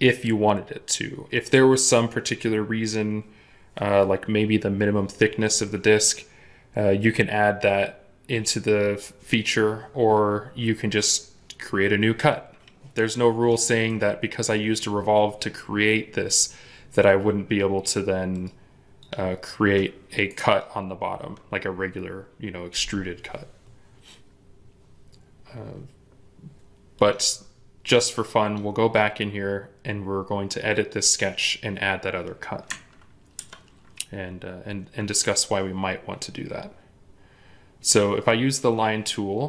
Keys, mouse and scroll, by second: 13.4 middle click, 18.2 right click, 19.6 middle click, 33.3 ctrl+8.